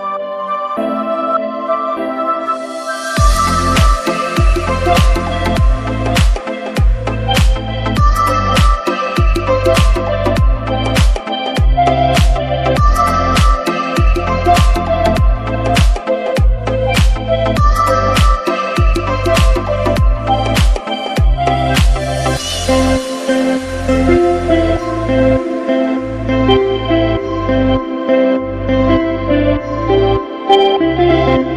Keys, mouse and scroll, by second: 3.6 click, 13.8 click, 20.8 click, 30.2 click.